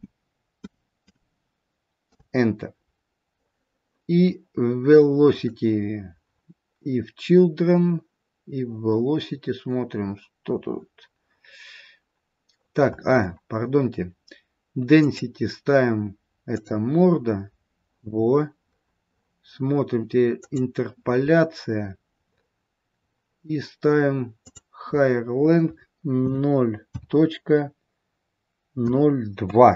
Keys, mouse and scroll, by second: 3.9-5.2 scroll down 1, 5.2 click, 5.2-6.2 scroll down 1, 6.2-7.1 scroll down 5, 9.9-10.3 scroll up 1, 10.6-12.5 scroll down 1, 12.5-14.9 scroll down 15, 14.9 click, 14.9-16.2 scroll down 1, 18.7-19.1 scroll up 2, 20.9 click, 20.9-21.4 scroll up 3, 22.1-24.4 scroll up 10, 24.4 click.